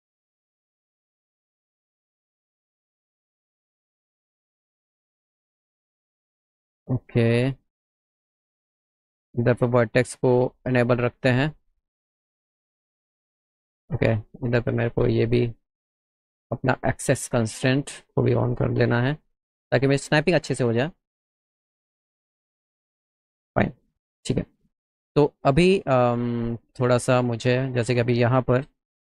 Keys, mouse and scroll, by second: 1.5 click, 2.8 click, 4.5 click, 5.1 click, 8.2 click, 9.7 click, 10.2 click, 10.5 click, 11.2 click, 12.9 click, 14.0 ctrl+z, 14.7 right click, 17.1 click, 18.7-19.9 drag, 20.7 click, 22.2 click, 27.8 click, 28.4 middle click.